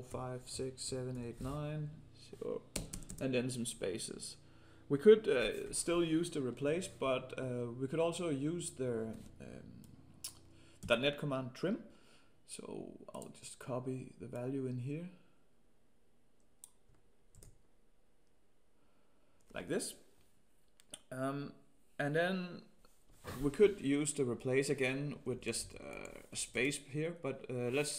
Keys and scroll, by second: 10.8 ctrl+c, 17.3 ctrl+v.